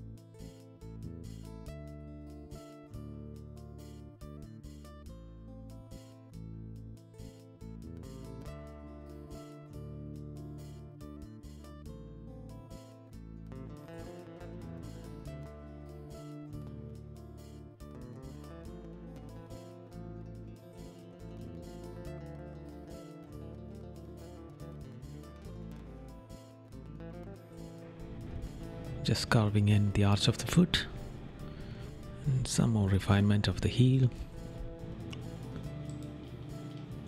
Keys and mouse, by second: 1.1 right click, 2.7 right click, 4.9 right click, 5.5 right click, 5.9 right click, 6.9 right click, 8.8 right click, 9.8 right click, 10.6 right click, 11.1 right click, 13.0 right click, 13.6 right click, 14.1 right click, 15.2 right click, 17.4 right click, 18.5 right click, 20.5 right click, 21.5 right click, 23.7 right click, 24.9 right click, 25.4 right click, 27.0 right click, 27.6 right click, 29.9 right click, 32.5 right click, 33.8 right click, 35.1 right click, 36.3 right click.